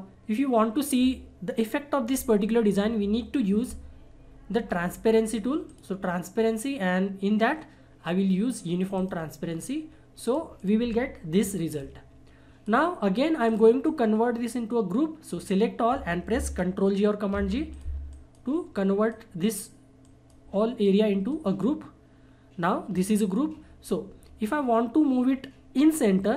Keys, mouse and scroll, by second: 5.6 click, 9.0 click, 9.0-17.4 drag, 17.4 ctrl+g, 17.7 click.